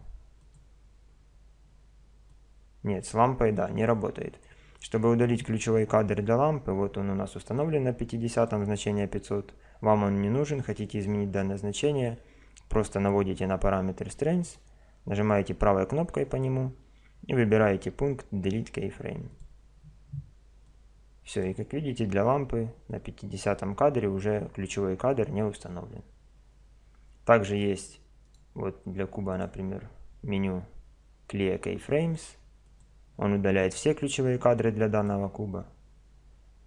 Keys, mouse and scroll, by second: 2.3 click, 7.6 click, 14.4 right click, 20.6 click, 22.9-24.7 drag, 28.2 right click, 28.8-29.4 drag, 33.6-35.3 drag, 35.3 middle click.